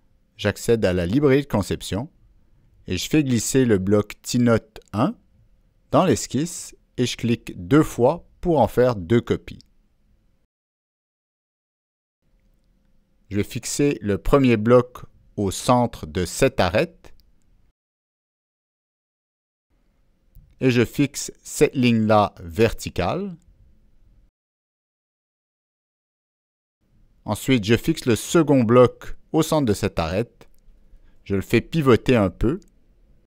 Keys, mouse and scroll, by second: 3.0-4.1 drag, 5.2 click, 6.0 click, 7.4 click, 12.2-15.4 drag, 15.9 click, 16.5 click, 19.2 click, 20.5 click, 21.7 click, 23.2-28.1 drag, 29.7-30.9 drag, 32.0 click, 32.7 click.